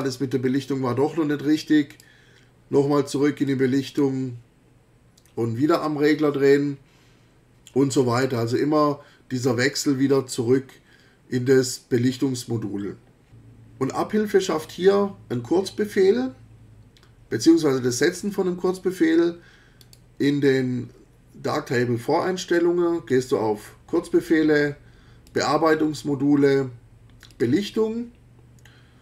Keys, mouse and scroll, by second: 1.9 click, 3.5-4.2 drag, 19.8 click, 23.1 click, 25.3 click, 27.3 click.